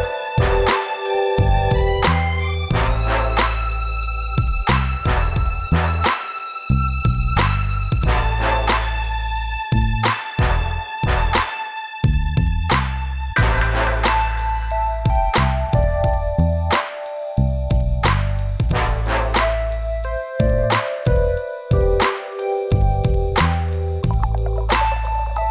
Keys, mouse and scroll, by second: 0.4 scroll down 1, 1.1 middle click, 2.2 click, 4.1 click, 7.0 click, 7.4 click, 8.7 click, 10.6 click, 11.9 click, 15.1 click, 15.2 click, 15.7 click, 15.7 click, 16.6 click, 16.7 click, 16.9 click, 17.0 double click, 17.5 double click, 23.8 click.